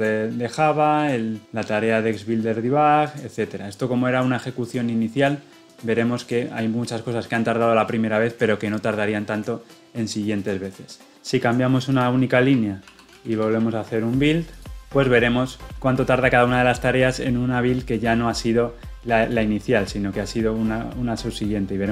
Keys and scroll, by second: 14.8 ctrl+F9.